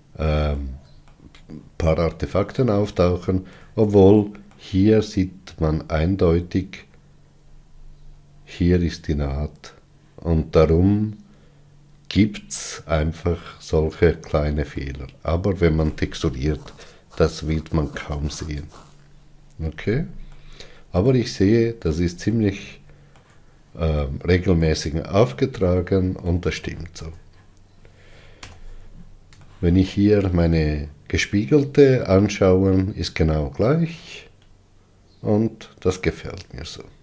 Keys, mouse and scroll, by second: 0.8 middle click, 1.3-6.4 shift+middle drag, 6.4 scroll up 2, 7.4-8.3 scroll up 4, 13.2 scroll down 2, 15.0-18.7 middle drag, 18.7-20.2 scroll down 13, 20.5-28.6 middle drag, 28.6 n, 29.7-35.2 shift+middle drag.